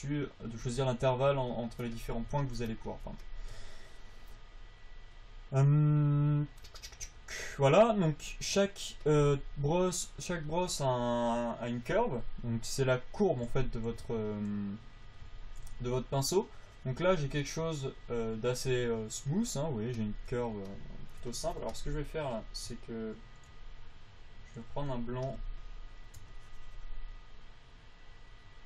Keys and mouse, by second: 15.7 a, 16.1 f, 16.7-19.9 drag, 25.6 f.